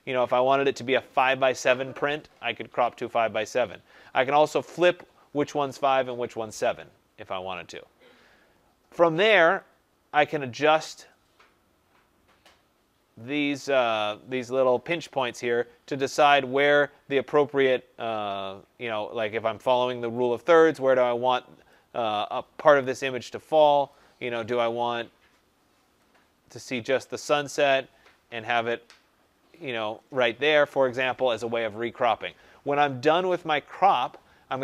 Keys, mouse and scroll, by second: 1.2 click, 4.7 click, 9.8-16.2 drag, 21.6 click, 23.8 click, 24.5-26.6 scroll, 26.9 click, 30.1 click.